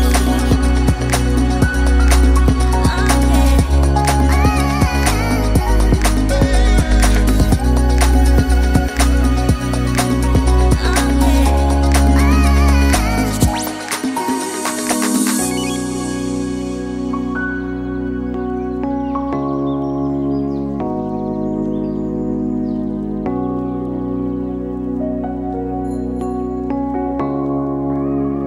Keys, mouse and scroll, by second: 1.0 middle click, 2.6 shift+middle click, 3.0 middle click, 4.8 click, 7.5 shift+middle click, 7.8 middle click, 11.3 click.